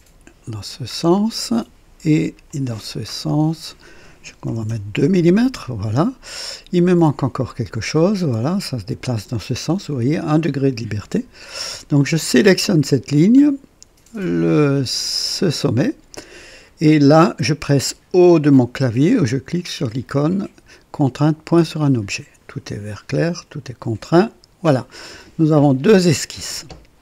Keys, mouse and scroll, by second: 0.4 typing, 0.9-1.2 scroll up 2, 2.4 click, 3.6 click, 4.5 KP_2, 4.7 Return, 5.9-6.2 scroll down 2, 7.5-9.5 drag, 9.5 typing, 11.9 click, 15.2 click, 21.5 o, 24.0 click.